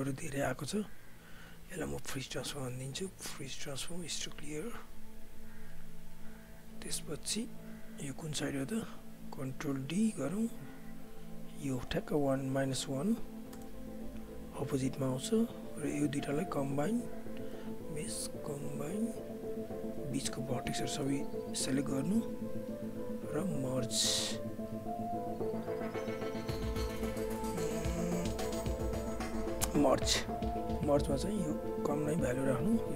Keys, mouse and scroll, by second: 0.5 w, 1.1 alt+click, 7.6 r, 8.2 click, 8.7 ctrl+z, 9.5 ctrl+d, 10.0 click, 13.5 Return, 14.4 alt+click, 18.9 right click, 20.2-24.1 drag, 30.4-32.9 drag.